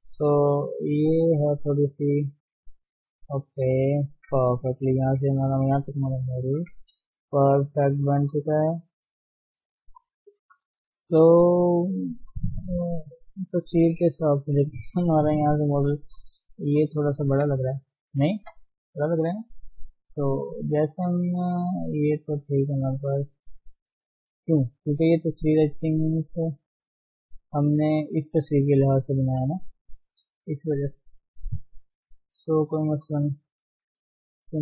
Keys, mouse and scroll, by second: 0.2-0.9 scroll up 2, 0.5 middle click, 0.9 middle click, 1.6 click, 3.0 middle click, 3.7 middle click, 4.1-4.7 scroll down 5, 6.2 KP_1, 6.8-8.4 scroll up 2, 8.4 scroll down 3, 8.6 middle click, 9.0 middle click, 10.0 KP_3, 10.3-10.6 scroll up 4, 10.6 scroll down 1, 10.8 shift+middle click, 11.1 shift+z, 11.4-11.9 scroll up 3, 11.9 shift+middle click, 12.2-12.6 scroll down 2, 12.6 scroll up 1, 13.4-14.1 scroll down 4, 14.4-15.3 scroll up 3, 15.5-15.9 scroll down 2, 15.9 shift+z, 16.7 click, 17.2 shift+z, 17.4-18.4 scroll up 1, 18.4 shift+z, 19.5 shift+z, 20.7 click, 22.9 click, 23.7-24.4 scroll down 4, 24.4-25.2 scroll down 2, 25.2-26.7 scroll down 6, 26.7-28.6 shift+middle drag, 28.6-29.0 scroll up 1, 29.0-30.0 shift+middle drag, 30.0-30.9 scroll up 5, 30.9 shift+middle click, 31.2-31.5 scroll up 1, 31.5 shift+middle click, 31.9-32.4 scroll up 1, 32.4 Tab, 33.8-34.6 scroll down 3.